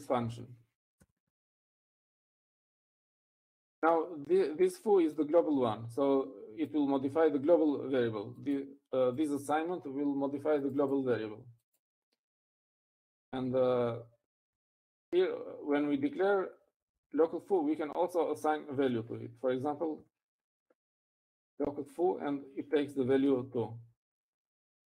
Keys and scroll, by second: 2.7-4.0 typing, 15.0 Down, 15.2 Down, 15.3 Down, 15.8 Down, 16.3 Down, 16.8 Up, 17.3 Right, 17.7 Right, 17.8 Right, 18.0 Right, 18.2 Right, 18.7 Right, 19.0 Right, 19.3 Right, 20.8-21.8 typing, 23.0 typing, 24.3 Escape.